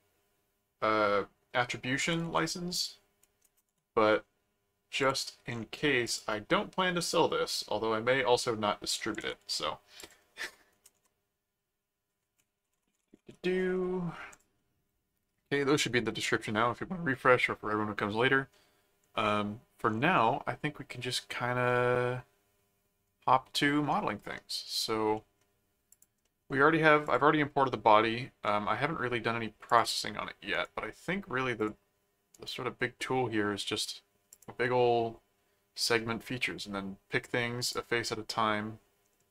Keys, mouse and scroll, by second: 2.2 ctrl+alt+d, 2.3 ctrl+alt+c, 2.7 click, 3.4 shift+Return, 3.9 ctrl+v, 5.0 click, 6.0 click, 7.0 click, 9.2 alt+d, 9.4 ctrl+alt+c, 10.0 click, 10.9 ctrl+shift+Return, 10.9 v, 12.5-13.7 typing, 14.3 click, 20.2 middle click, 21.7-23.8 middle drag, 24.3 middle click, 25.1 middle click, 25.9 click, 26.2 middle click, 27.0 click, 28.5 middle click, 29.7 click, 30.5 right click, 31.5 click, 32.3 right click, 34.3 click, 37.6 click.